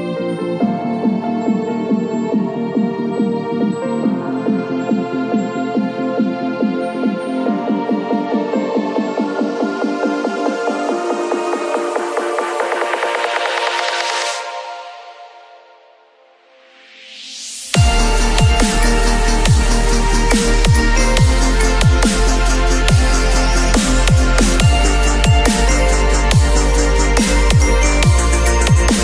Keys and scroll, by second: 23.8 b, 24.3 p.